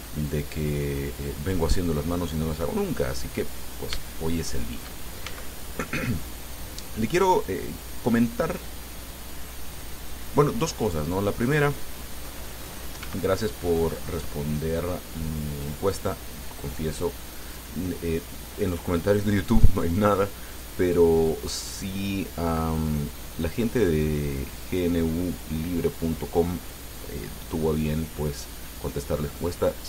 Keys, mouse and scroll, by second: 1.4 click, 3.1-4.1 drag, 4.3 shift+middle click, 5.5 shift+s, 7.0 click, 7.9-9.1 drag, 9.7 click, 11.4-13.1 drag, 13.3 s, 16.2 click.